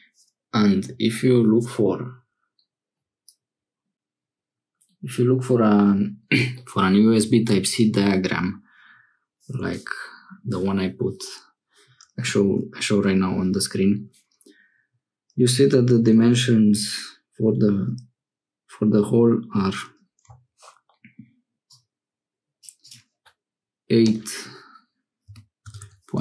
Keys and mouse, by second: 21.6-22.7 drag, 22.8-26.2 drag.